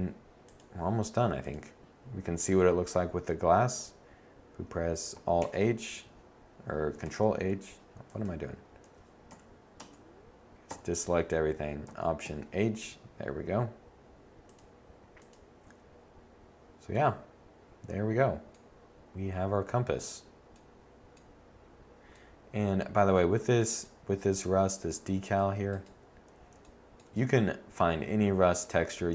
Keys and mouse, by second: 5.4 alt+h, 7.0 ctrl+h, 9.3 a, 9.8 Tab, 10.7 a, 12.2 alt+h.